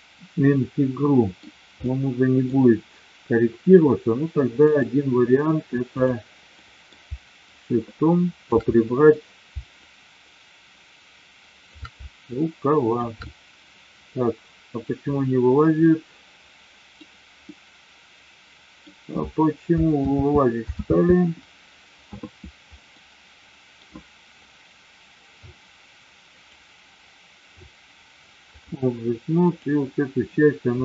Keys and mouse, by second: 1.8-2.4 middle drag, 4.5-6.1 drag, 6.5 middle click, 7.4-8.5 shift+drag, 8.7 middle click, 9.8-11.8 shift+drag, 12.3 shift+click, 13.1-14.9 middle drag, 15.8-16.9 middle drag, 17.4-18.8 middle drag, 20.0 ctrl+z, 20.8 ctrl+z, 23.0 middle click, 26.4-28.8 drag, 29.4 click.